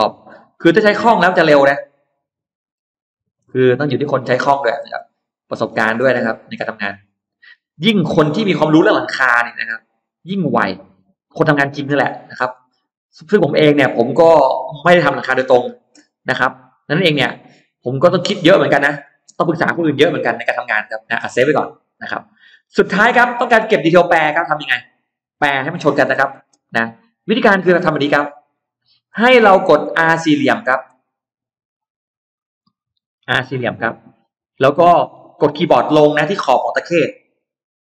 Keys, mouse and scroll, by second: 0.1 click, 0.9 click, 1.2 scroll down 1, 1.7-2.0 scroll up 1, 2.2 click, 2.6-2.9 scroll down 1, 2.8 shift+middle click, 4.2 click, 4.5-4.9 scroll down 1, 4.8 middle click, 5.3 scroll down 1, 5.7-6.5 scroll up 1, 6.3 middle click, 7.3-7.7 scroll down 1, 8.1 click, 9.1 click, 9.5 scroll up 2, 10.1 click, 11.0 click, 11.4 scroll down 2, 11.8 scroll up 2, 12.3 click, 12.6-12.9 scroll down 2, 13.3-13.9 scroll up 2, 15.1 click, 16.4-18.2 middle drag, 18.2-18.9 scroll down 1, 18.9 middle click, 19.3 space, 19.4 click, 19.9-20.3 scroll down 1, 20.3 middle click, 21.0 scroll down 1, 21.8 click, 22.7-25.5 scroll up 10, 23.2 middle click, 25.3 middle click, 26.5-26.8 scroll down 2, 27.1 middle click, 27.8-28.1 scroll down 2, 28.4 middle click, 28.9 scroll down 2, 29.7 middle click, 30.6 scroll up 2, 30.8 middle click, 32.4 middle click, 33.8 r, 34.6 middle click, 36.7 scroll up 2.